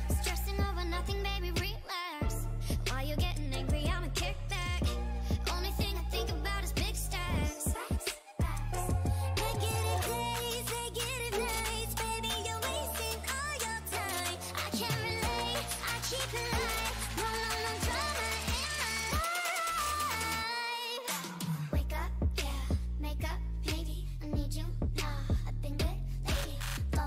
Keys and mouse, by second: 0.6 a, 0.8 a, 0.8 w, 1.5 a, 2.7-4.0 drag, 3.2 f, 3.4 f, 3.6 a, 5.4 g, 6.3 o, 6.7 g, 8.1-9.4 drag, 8.6 f, 11.6 f, 14.6 ctrl+r, 15.0 a, 17.5 ctrl+r, 19.7 ctrl+r, 20.2 a, 23.3 ctrl+r, 23.7 a, 26.3 middle click.